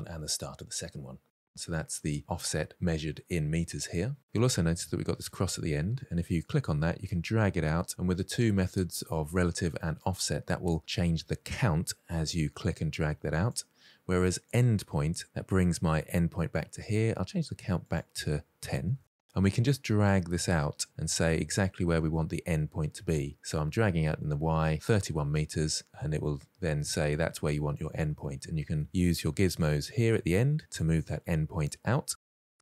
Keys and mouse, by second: 6.2-11.2 drag, 13.0 click, 14.1 click, 16.0-16.3 middle drag, 18.3 click, 19.9-23.5 drag, 25.7-27.5 drag, 27.9 middle click, 28.4 shift+middle click, 29.5-30.6 drag, 30.9-31.6 drag, 31.7 ctrl+z, 32.0-32.6 drag.